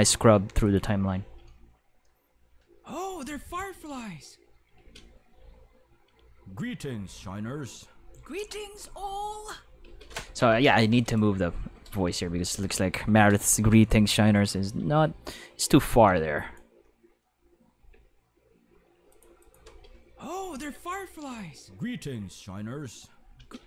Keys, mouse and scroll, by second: 0.6 click, 1.2 space, 4.7 space, 4.9 5, 5.4 space, 9.8 space, 9.9 5, 10.5 ctrl+5, 11.0 click, 12.4 middle click, 13.1 alt+a, 13.2-15.4 typing, 15.2-16.6 drag, 17.5-18.4 typing, 19.1 click, 19.4 click, 19.6 space, 19.7 5, 23.2-23.6 typing.